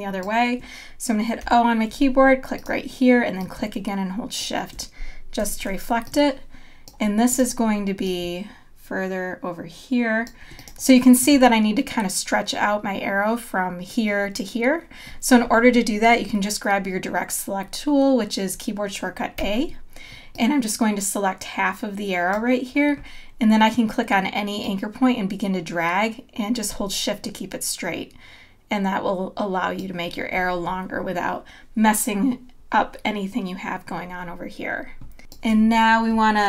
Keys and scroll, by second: 1.4 o, 5.4 v, 19.4 a, 35.2 space.